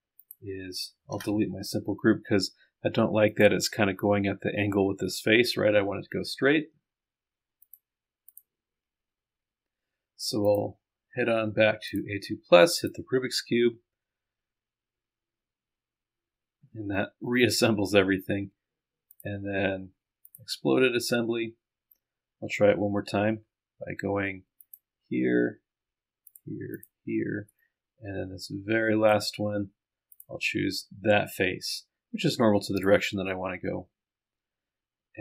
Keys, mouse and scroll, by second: 3.3 click, 7.7 click, 8.3 click, 10.5 click, 11.9 click, 12.8 click, 19.2 click, 20.3 click, 21.7-22.4 scroll down 2, 23.4-24.1 scroll up 2, 24.6 ctrl+click.